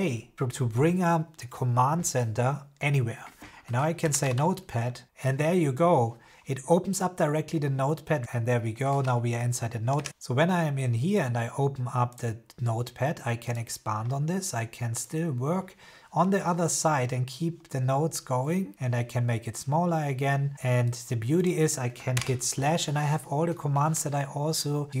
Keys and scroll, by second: 4.2 e, 22.0 /.